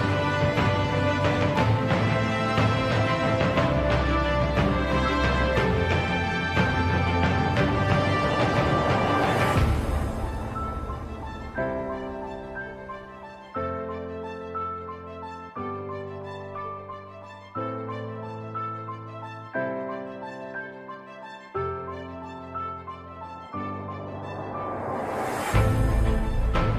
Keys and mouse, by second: 0.5 g, 5.6 middle click, 6.9-8.6 middle drag, 10.0 middle click, 11.1 middle click, 15.9 ctrl+KP_1, 18.7 e.